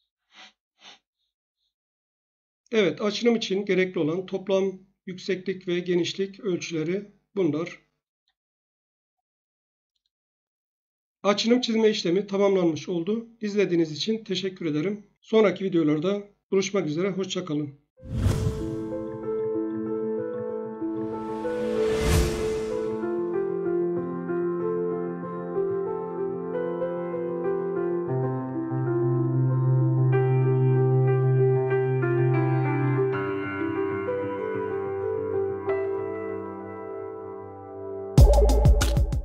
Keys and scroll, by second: 0.2 space, 0.7 space.